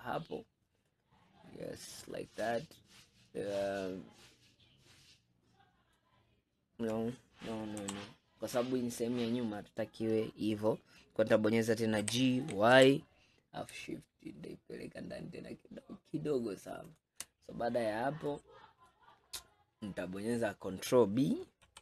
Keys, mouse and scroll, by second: 0.2 scroll down 1, 0.9-7.2 middle drag, 7.9 KP_3, 8.6 scroll up 1, 12.1 g, 17.7-18.3 scroll up 2, 18.3 middle click, 19.1-20.0 scroll down 5, 20.0-21.7 middle drag, 21.7 ctrl+b.